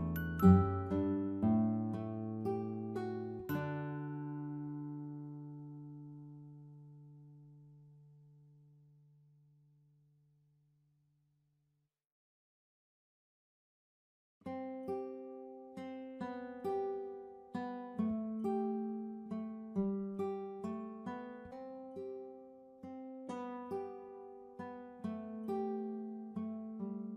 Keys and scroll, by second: 14.4-16.0 typing.